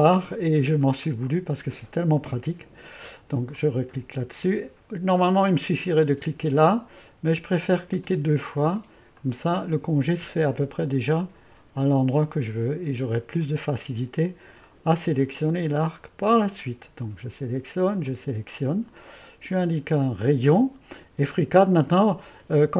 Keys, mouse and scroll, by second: 1.1-2.5 middle drag, 3.6-6.7 drag, 8.1-12.4 drag, 13.1-14.7 drag, 14.7-16.3 middle drag, 16.3-17.4 drag, 18.1-20.2 drag.